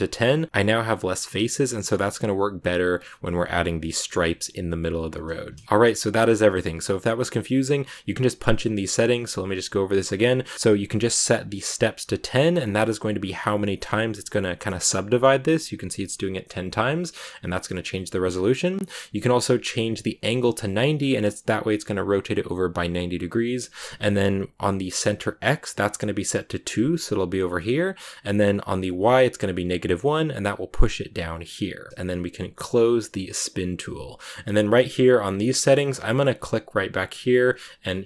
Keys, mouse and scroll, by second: 5.0-5.6 scroll down 1, 16.7 click, 18.9 click, 19.9 click, 33.3-36.2 drag.